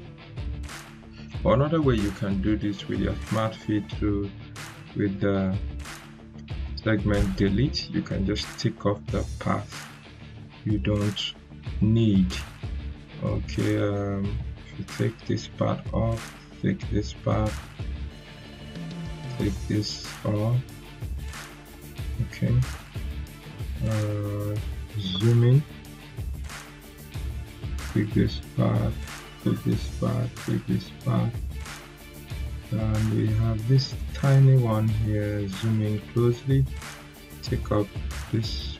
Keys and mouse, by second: 2.1 Delete, 5.5-6.1 drag, 21.5 right click, 24.0-24.6 drag.